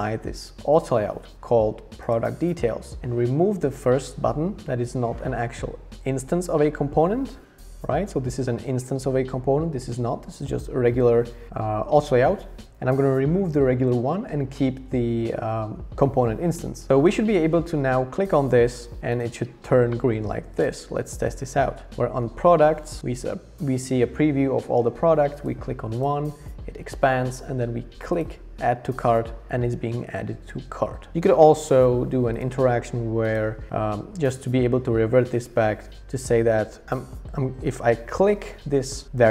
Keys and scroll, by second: 16.8 BackSpace.